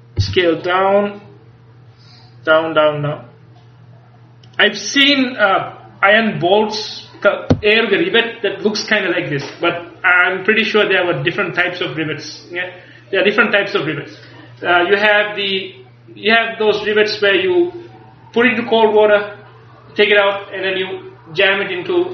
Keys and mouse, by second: 0.3 s, 4.6-6.5 drag.